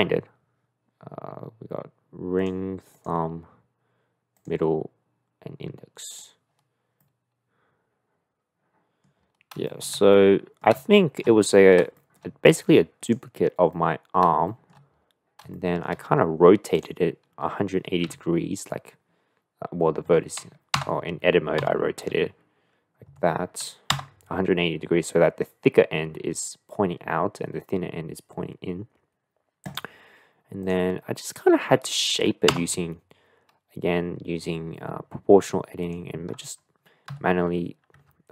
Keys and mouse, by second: 2.3 click, 3.0 click, 4.4 click, 6.1 click, 7.1-9.0 middle drag, 9.7 shift+middle click, 10.1-10.6 middle drag, 11.0 shift+middle click, 11.5 middle drag, 11.9 shift+middle drag, 12.5 click, 13.7-14.2 middle drag, 14.5 shift+middle drag, 15.5 shift+middle click, 16.1-18.0 drag, 18.0 r, 20.8 Tab, 21.6 a, 22.1 r, 24.0 Tab, 32.5 Tab, 35.8 click, 37.1 g.